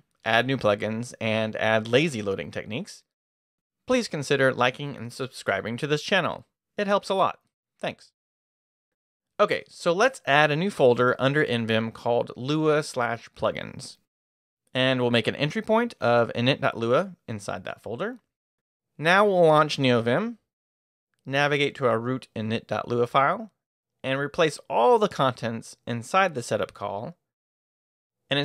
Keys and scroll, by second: 20.1 Return, 20.7-21.6 typing, 22.1 Return, 24.1-28.4 typing.